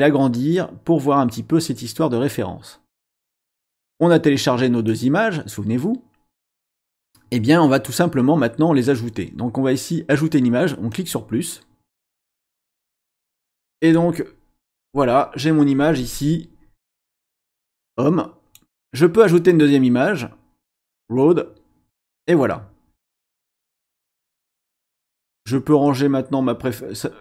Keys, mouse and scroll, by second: 4.9-6.8 drag, 10.9 click, 12.1 click, 13.8 click, 16.8-18.7 drag, 19.4 click, 20.7 click, 25.3-27.2 drag.